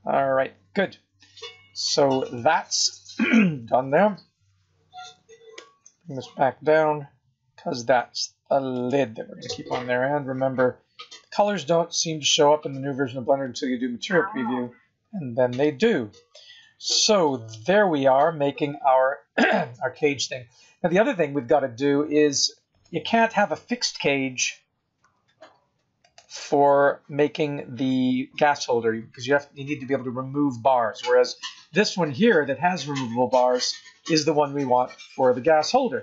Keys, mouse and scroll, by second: 5.0 g, 9.6-10.2 scroll down 3, 12.0 z, 14.6-15.5 scroll up 6, 15.8-16.5 scroll down 9, 16.8 middle click, 21.1 scroll up 4, 22.7 click, 25.0 g, 27.3 scroll down 4, 28.0 scroll up 3, 31.5 click, 32.9 click, 35.2 click.